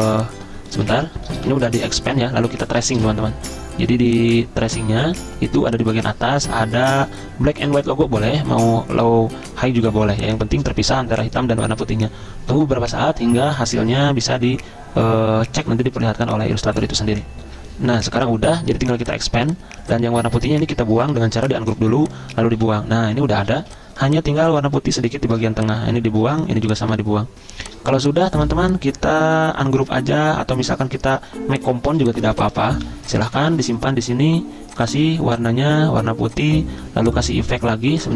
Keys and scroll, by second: 0.9 ctrl+z, 1.4 v, 3.0 v, 17.4 F10, 17.6 F10, 22.6 Delete, 23.6 z, 25.3 v, 26.3 Delete, 26.9 Delete, 27.6 z, 28.4 v, 31.9 z, 32.8 v.